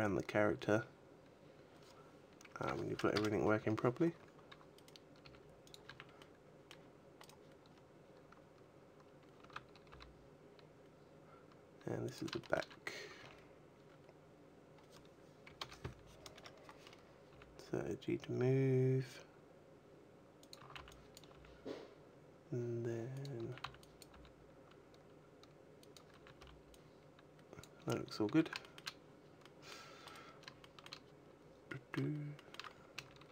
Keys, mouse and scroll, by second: 3.4 a, 3.9-4.5 scroll up 1, 4.5 right click, 4.5-5.0 scroll up 1, 5.0 g, 5.6 click, 5.6 a, 5.9 middle click, 7.0 right click, 7.5-8.3 scroll down 9, 8.7-9.1 scroll up 2, 9.1 a, 9.6 g, 11.9 click, 12.2 shift+middle click, 12.5-13.0 scroll up 2, 13.0 r, 16.7-17.1 scroll up 1, 17.1 g, 20.3 click, 20.4 a, 20.5 b, 21.1 g, 23.0 click, 23.2 a, 23.8 b, 23.9 g, 25.7 click, 25.7 a, 25.9 b, 27.5 a, 28.0 a, 28.4 shift+middle click, 29.2 middle click, 29.6 right click, 30.3 shift+middle click, 31.0-31.4 scroll down 2, 31.4 middle click, 32.1 shift+middle click, 32.5 scroll down 4, 32.7 a, 33.1 g.